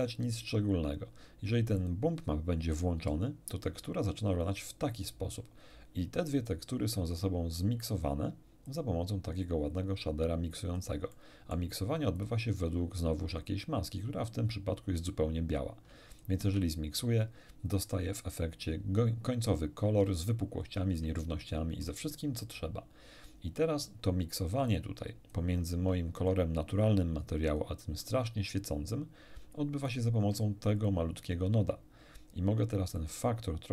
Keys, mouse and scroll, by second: 1.8 click, 3.0 m, 7.2 middle click, 8.6-11.0 drag, 11.1 middle click, 12.2 ctrl+shift+click, 16.1 ctrl+shift+click, 18.7-19.2 scroll down 3, 20.0 scroll up 1, 20.6 scroll up 1, 21.2 shift+middle click, 24.7-25.5 drag, 26.2 ctrl+shift+click, 27.5 ctrl+shift+click, 29.8 ctrl+shift+click, 30.8 ctrl+shift+click, 33.0-33.7 drag.